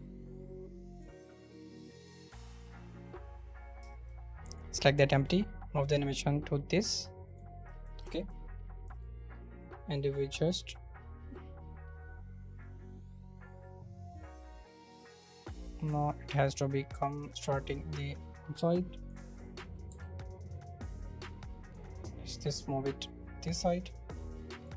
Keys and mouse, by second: 2.5 click, 4.0 click, 4.4 click, 5.9-7.4 drag, 7.7 middle click, 8.0 shift+middle click, 9.0 drag, 14.1-15.5 drag, 16.3-19.1 drag, 19.8 z, 20.8 click, 22.4 click, 23.2-24.7 drag.